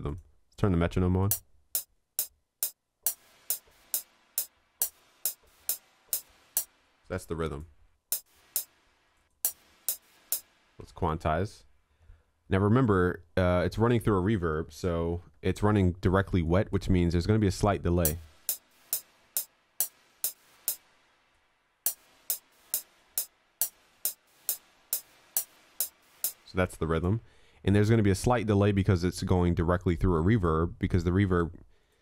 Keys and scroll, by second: 11.1 ctrl+a, 15.2 alt+q.